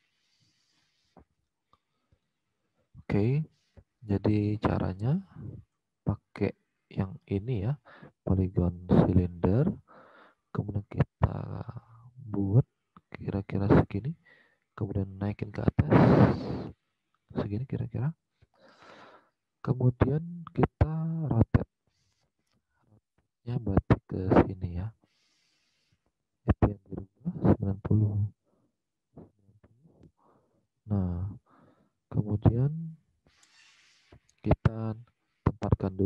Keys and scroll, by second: 1.1 alt+Tab, 28.9-29.8 typing, 29.9 Return.